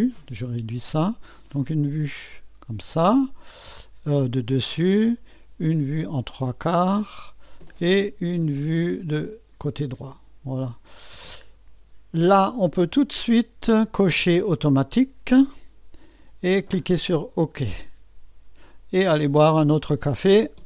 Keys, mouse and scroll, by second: 0.0-1.6 scroll down 2, 1.6 click, 6.4 click, 9.3-12.5 drag, 13.7-19.3 drag.